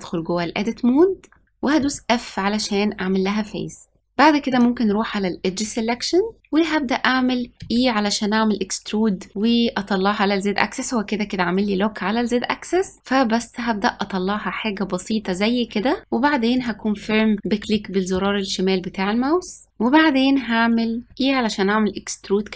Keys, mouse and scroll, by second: 0.0 Tab, 1.7 f, 4.4-5.9 drag, 5.9-6.4 scroll up 1, 6.4-7.4 middle drag, 7.5 e, 17.6-19.7 shift+middle drag, 21.1 e.